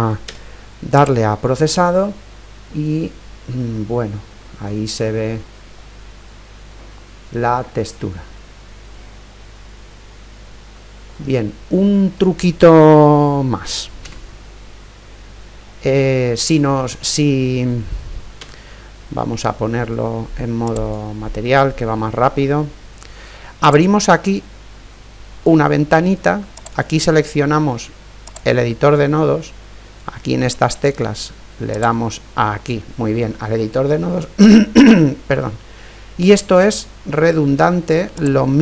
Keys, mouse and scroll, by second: 0.3 z, 3.7-8.4 middle drag, 8.8-9.1 scroll up 2, 8.9 middle click, 9.5-11.3 middle drag, 11.7-13.7 middle drag, 14.1 KP_0, 18.7 z, 21.0-22.9 drag, 22.8 middle click, 23.7-25.7 drag, 26.6-28.5 drag, 31.7-34.0 drag, 33.5-36.1 middle drag, 34.0-35.6 scroll up 1, 38.1 click.